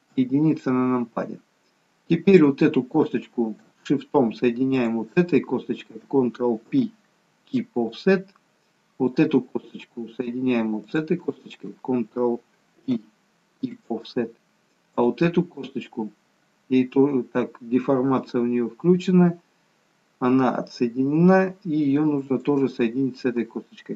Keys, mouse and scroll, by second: 0.1 KP_1, 2.4 click, 4.9 shift+click, 6.7 ctrl+p, 9.0 click, 10.9 shift+click, 12.8 ctrl+p, 15.0 click, 22.4 shift+click.